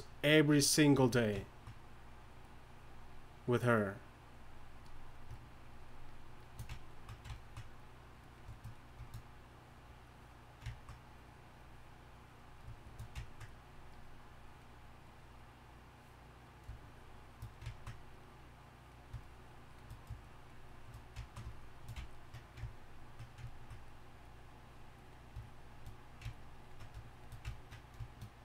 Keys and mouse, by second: 17.6-19.9 drag, 22.7 drag, 23.2-23.5 drag, 24.2-28.4 drag.